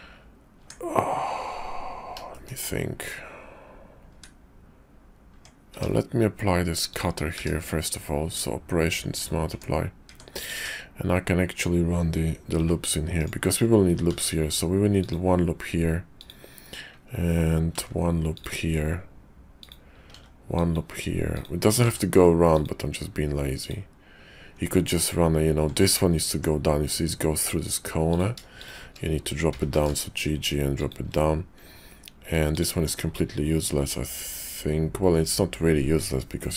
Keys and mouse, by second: 0.5 Tab, 2.3 shift+click, 4.1 Tab, 5.3 Tab, 5.7 q, 7.3 q, 9.5 Tab, 10.1 Tab, 10.4 click, 10.6 Tab, 12.6 k, 14.0 ctrl+r, 17.6 ctrl+r, 20.0 ctrl+r, 21.8 ctrl+r, 26.3 Tab, 29.3 g, 33.1-36.5 middle drag.